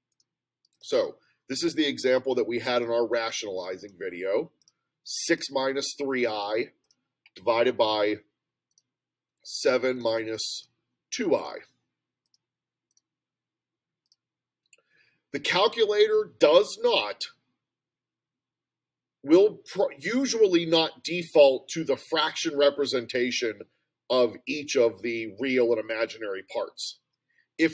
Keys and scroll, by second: 0.8 6, 2.8 -, 3.2 3, 4.6 ., 5.4 ), 6.9 /, 6.9 (, 8.8 7, 10.0 -, 10.6 2, 12.3 ., 12.9 ), 14.1 Return.